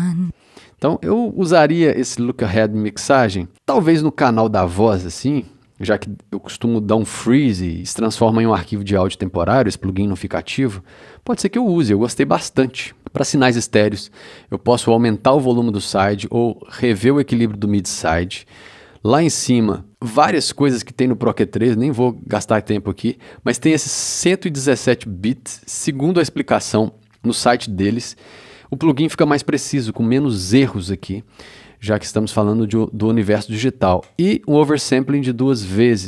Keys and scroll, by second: 0.1 space.